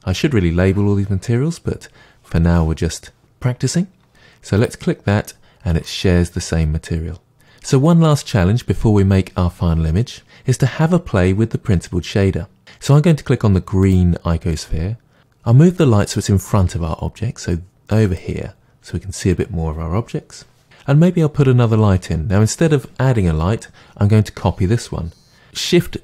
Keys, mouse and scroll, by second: 4.7-5.8 drag, 5.8-13.9 middle drag, 13.9 click, 16.5 g, 18.2 click.